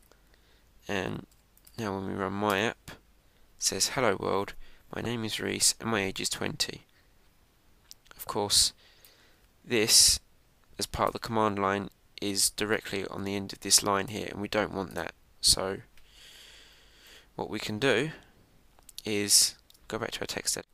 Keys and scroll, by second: 3.4 Return, 17.2 Up, 20.0 super+Tab.